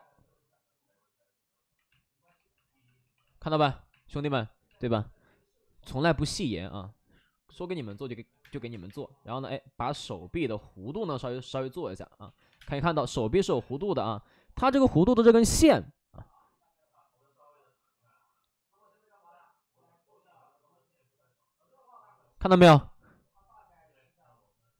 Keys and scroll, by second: 2.1 alt+2, 2.9 alt+s, 2.9 2, 3.2 alt+s, 7.5-8.8 typing, 9.8 space, 12.1 ctrl+z, 12.4 3, 12.5 space.